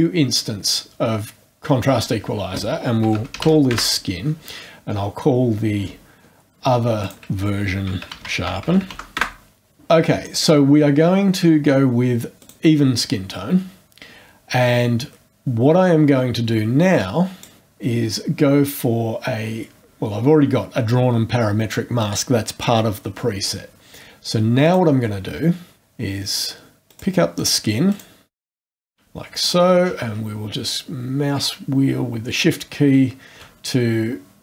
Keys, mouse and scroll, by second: 2.8-3.9 typing, 7.0 ctrl+click, 7.7-9.4 typing, 10.2 click, 12.4 click, 15.3-15.9 scroll up 2, 16.0-16.4 scroll up 2, 16.9-17.6 drag, 17.9 scroll down 2, 24.6 click, 26.9 click, 27.4 click, 27.9 click, 28.3 click, 28.3 click, 28.4 click, 28.5 click, 28.6 click, 28.7 click, 28.8 click, 29.4-29.8 shift+scroll down 2, 30.7 shift+scroll down 2.